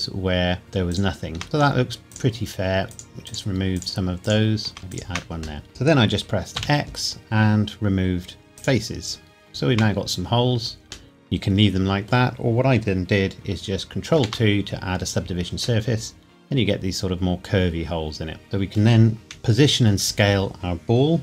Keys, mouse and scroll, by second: 0.6 shift+click, 4.8 middle click, 4.9 shift+click, 5.6 middle click, 6.6 x, 8.6 click, 9.8 Tab, 11.1 middle click, 14.2 ctrl+2, 15.8 middle click, 19.3 KP_1.